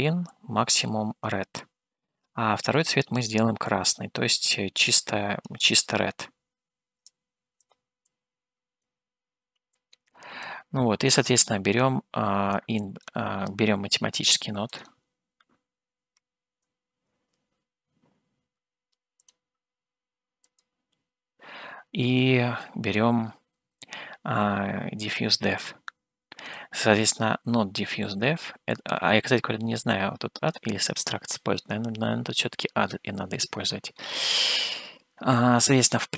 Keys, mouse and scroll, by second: 2.6 click, 10.5 click, 12.6 click, 14.3 shift+a, 26.6-28.2 drag, 28.8-30.6 drag, 31.7-32.9 middle drag, 33.4 shift+middle click, 34.3-35.6 scroll up 3, 35.6 middle click.